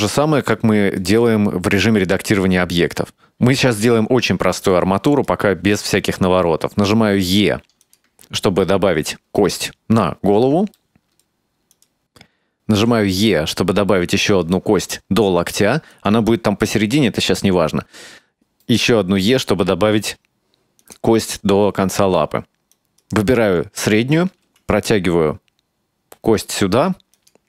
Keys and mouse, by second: 0.6 shift+middle click, 3.8-5.4 right drag, 6.7 e, 8.6 shift+middle click, 11.0 shift+middle click, 11.8 right click, 12.8 e, 18.1 e, 22.8 right click, 24.5 e.